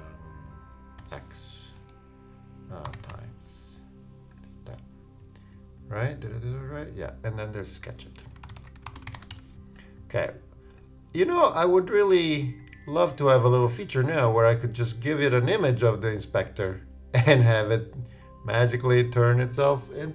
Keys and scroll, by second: 8.1-9.8 typing.